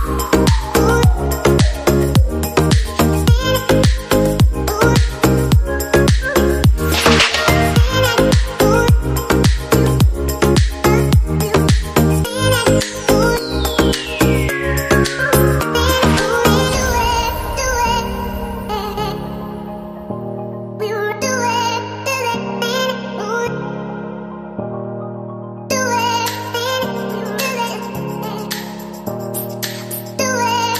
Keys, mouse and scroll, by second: 3.0 right click, 4.5 right click, 6.4 right click, 7.9 right click, 12.1 right click, 13.3 right click, 24.7 right click, 28.3 right click, 29.6 right click.